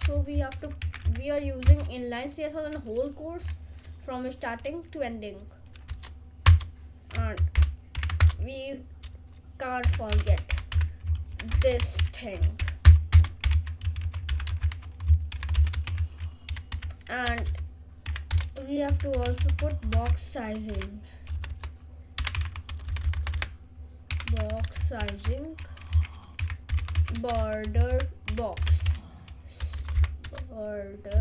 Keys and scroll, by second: 1.1 Down, 2.0 ctrl+space, 6.0 Return, 6.6 Return, 7.6 shift+8, 7.9 shift+[, 8.3 Return, 9.6-17.9 typing, 18.7 Return, 18.9-25.1 typing, 26.2-29.6 typing, 30.9-31.2 typing.